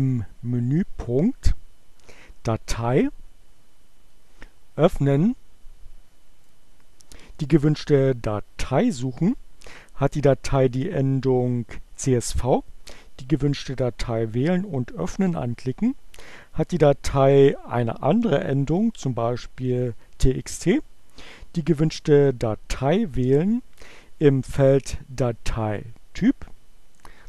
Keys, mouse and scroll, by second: 6.3 click.